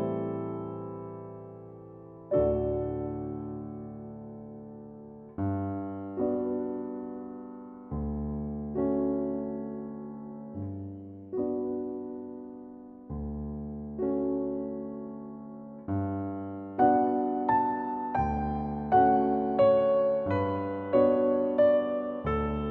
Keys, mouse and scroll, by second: 0.2-0.7 middle drag, 0.7-1.3 drag, 1.4 click, 1.9 middle click, 2.7-3.2 scroll down 3, 2.8 middle click, 3.0 KP_1, 3.2 right click, 3.3 g, 3.8 shift+d, 4.1 shift+d, 4.3 right click, 4.4 middle click, 4.6-5.5 scroll up 2, 4.7 shift+middle click, 6.5 click, 7.3 drag, 7.6 middle click, 7.9-9.4 drag, 9.4 middle click, 10.2 click, 10.8-11.1 shift+middle drag, 11.1 scroll up 1, 11.4 scroll down 1, 11.6-12.3 middle drag, 12.3 right click, 12.8 click, 14.3 click, 14.9-16.2 shift+middle drag, 16.3 s, 17.4 middle drag, 17.5-18.0 scroll down 3, 17.8 right drag, 18.0-18.4 shift+middle drag, 18.4-18.7 scroll up 3, 18.5 shift+middle click, 18.7 right click, 18.9 Tab, 19.1 middle drag, 19.2 Tab, 19.4 ctrl+a, 19.6 shift+middle click, 19.9 click, 20.6 click, 21.8 click, 22.1 middle click, 22.4 click.